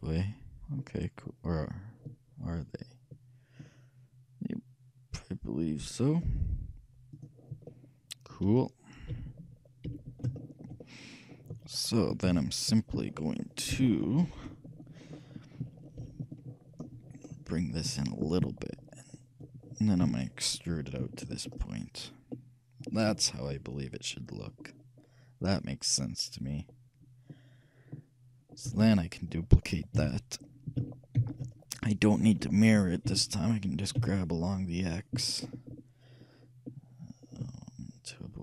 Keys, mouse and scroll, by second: 3.7-5.5 drag, 7.2-8.8 drag, 7.9-9.2 middle drag, 8.5 a, 9.2 a, 9.9 n, 10.6-12.5 shift+middle drag, 12.4 KP_1, 13.3-15.5 shift+middle drag, 16.1 shift+b, 18.1-19.9 drag, 20.1 e, 23.6-27.9 middle drag, 28.2 middle click, 28.8 a, 28.9 a, 30.0 KP_1, 31.3 shift+d, 33.1 g.